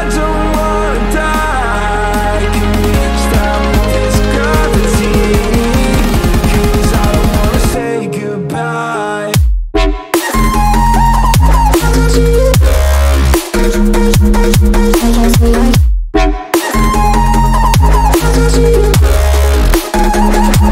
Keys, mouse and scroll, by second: 7.9 click, 8.8 click, 10.3 click, 11.4 click, 12.6 click, 13.0 click, 13.8 click, 14.9 click, 19.9 click.